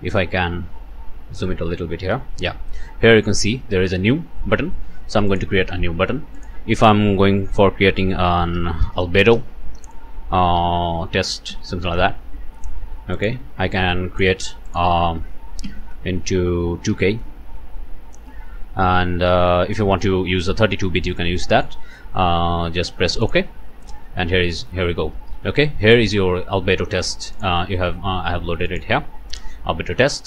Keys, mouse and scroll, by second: 0.2 ctrl+middle click, 0.3 ctrl+scroll down 2, 0.5 typing, 1.6-2.3 ctrl+scroll down 4, 5.3 click, 6.4 click, 8.4-9.3 typing, 10.9-11.9 typing, 13.1 click, 13.7 click, 14.7 click, 15.6 KP_Multiply, 16.9 KP_2, 17.6 KP_Enter, 23.2 click, 23.9-24.5 scroll down 4, 27.3 click, 28.7 click.